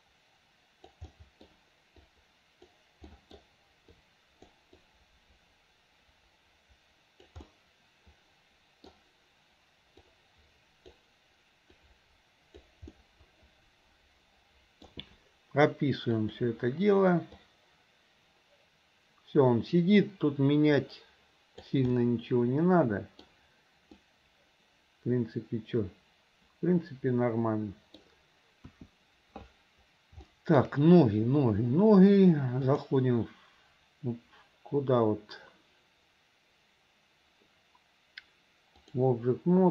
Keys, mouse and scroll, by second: 1.1 middle click, 2.1 click, 3.1 middle click, 4.0 click, 4.8-7.3 drag, 7.5-8.9 middle drag, 10.1 click, 11.8 click, 13.0-14.9 middle drag, 16.3 click, 17.5-21.8 drag, 22.0-23.3 middle drag, 24.0-28.0 middle drag, 28.7 KP_1, 30.3 middle click, 32.7-39.0 drag.